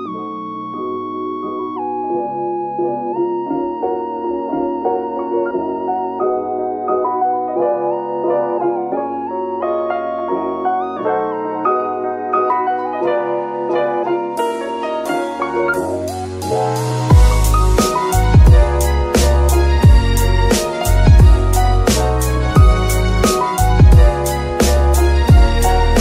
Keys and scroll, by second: 1.8 g, 1.9 y, 4.0 F2, 5.2 1, 6.4 Return, 7.2 g, 7.3 z, 24.9 Tab, 25.4 s.